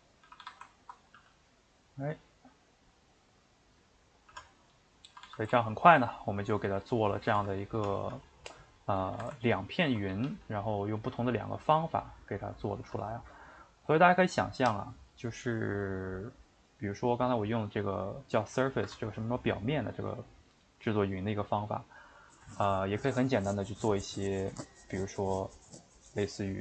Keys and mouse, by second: 0.2 a, 0.4 a, 0.8 ctrl+Right, 1.1 g, 4.4 Tab, 4.8 middle click, 5.1 a, 5.2 a, 5.5-7.2 ctrl+middle drag, 7.2 a, 7.3 a, 8.1 Tab, 9.0 a, 9.1 a, 9.8 ctrl+right click, 10.3 g, 12.9 Tab, 16.7 click, 17.1-26.6 middle drag.